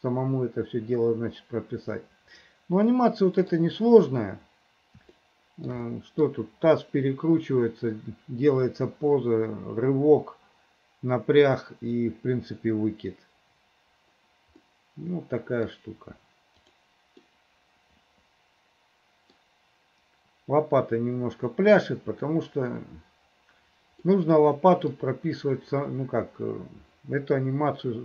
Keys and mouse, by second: 3.0 middle click, 5.3 shift+middle click, 5.9 middle click, 14.7-15.8 middle drag, 16.8 middle click, 17.3-19.5 middle drag, 24.1 middle click.